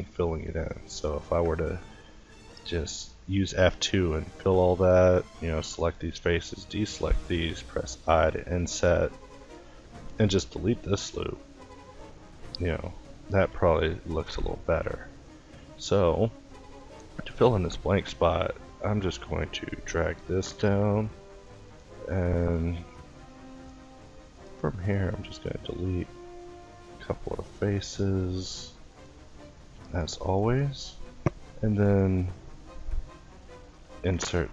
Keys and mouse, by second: 0.0-2.9 typing, 3.6 ctrl+t, 6.8 i, 7.9-9.9 middle drag, 9.9 x, 11.6-14.7 middle drag, 14.7 a, 15.2 a, 16.3 ctrl+t, 17.1 click, 19.9 e, 21.5 ctrl+i, 22.3 ctrl+i, 23.1 ctrl+t, 24.5-30.1 drag, 28.9 x, 30.1 middle click, 33.4 ctrl+t.